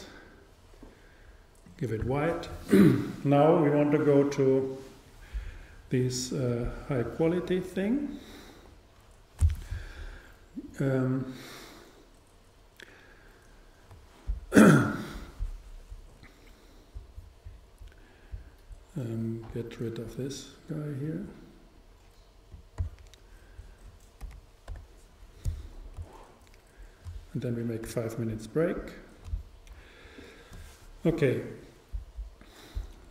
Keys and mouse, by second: 0.1-1.9 drag, 22.0 click, 24.3 n, 24.7 t.